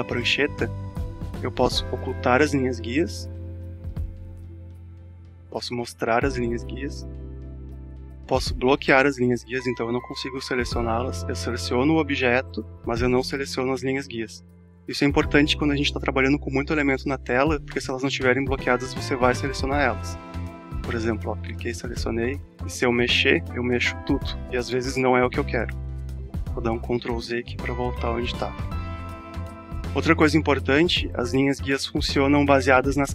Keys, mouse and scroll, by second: 3.6 right click, 5.1 click, 6.4 right click, 7.7 click, 9.1 right click, 10.6 click, 19.0 right click, 20.4-29.3 drag, 31.1 space, 31.4 click, 31.5 space.